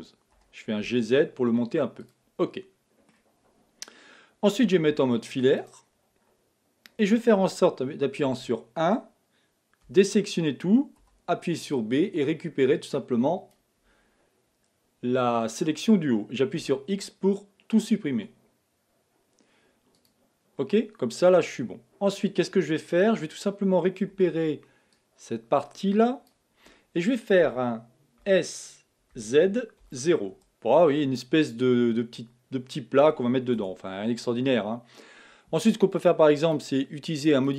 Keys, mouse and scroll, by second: 0.3 g, 2.4-4.9 middle drag, 4.9 z, 8.3 1, 9.8 a, 11.0 b, 16.6 x, 20.6-23.6 middle drag, 24.1 b, 28.6 s, 31.9-33.6 middle drag, 33.6 Tab, 33.9 middle click, 34.6-35.2 scroll up 1, 36.6 click, 37.4-37.5 drag.